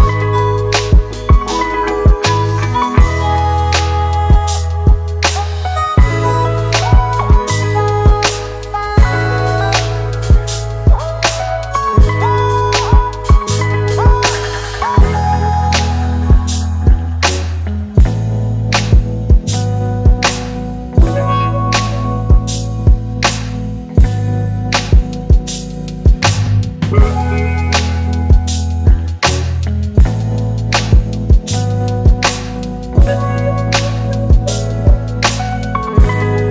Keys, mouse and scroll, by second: 3.4 right click, 4.7 double click, 17.7-19.8 scroll up 1, 25.5 ctrl+t, 26.5 alt+shift+click, 30.9 alt+shift+click.